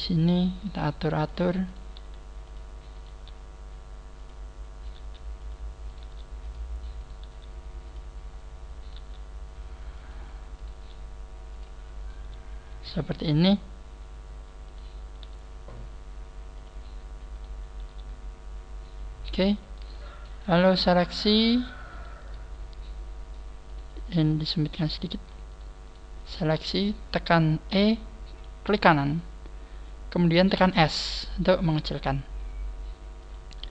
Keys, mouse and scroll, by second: 0.5 click, 1.7 right click, 1.9 g, 2.9 right click, 3.1 g, 4.9 right click, 5.9 right click, 6.0 g, 7.1 click, 7.1 right click, 7.2 g, 8.8 right click, 8.8 scroll down 2, 8.9 g, 10.6 click, 10.6 right click, 10.7 g, 12.0 right click, 12.1 g, 14.7 right click, 15.2 g, 17.3 click, 17.3 right click, 17.8 g, 19.3 click, 20.3 right click, 20.8 shift+right click, 21.3 shift+right click, 21.6 shift+right click, 22.5 scroll up 1, 23.7 shift+right click, 24.3 click, 25.5 shift+right click, 25.9 shift+right click, 26.2 shift+right click, 27.7 e.